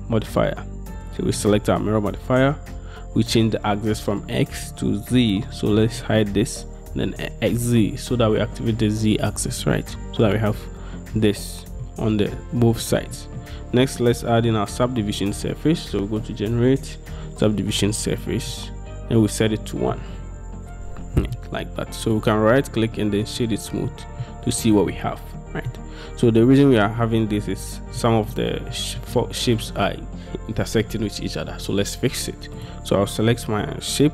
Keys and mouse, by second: 6.0 middle click, 7.2 middle click, 9.7-10.4 middle drag, 11.2-11.9 middle drag, 13.2 middle drag, 14.1-17.9 middle drag, 18.6-20.0 middle drag, 22.2-23.5 middle drag, 24.0-24.3 middle drag, 25.0-25.8 middle drag, 28.1-28.4 middle drag, 28.8 middle drag, 32.7 middle click.